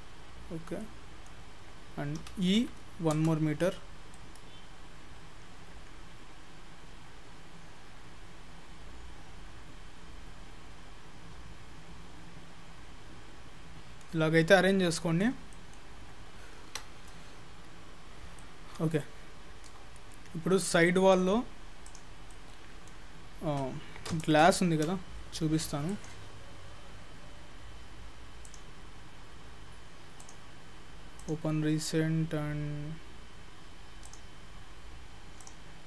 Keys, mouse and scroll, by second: 0.2 scroll down 4, 0.8 middle click, 0.8 scroll down 1, 2.2 e, 3.7-4.2 scroll down 2, 4.2 middle click, 14.4-14.9 scroll up 4, 14.9 shift+middle click, 15.5 middle click, 16.4-17.0 scroll down 4, 16.7 Tab, 17.0-18.0 scroll up 5, 18.4 middle click, 19.1 shift+middle click, 20.0-20.5 scroll down 3, 20.4-20.7 scroll up 2, 20.8 shift+middle click, 21.9 click, 22.2 scroll down 2, 22.4 middle click, 25.2 ctrl+s.